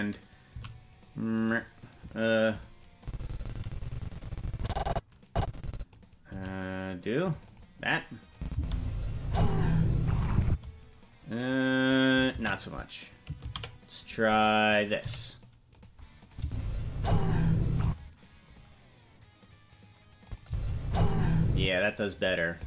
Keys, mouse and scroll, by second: 0.4 s, 3.0-5.9 drag, 6.2 s, 8.3 click, 8.5 space, 10.4 space, 12.7 ctrl+z, 13.8 ctrl+z, 14.6 right click, 15.0 g, 16.3 click, 16.4 space, 17.8 space, 20.2 click, 20.4 space, 21.6 space.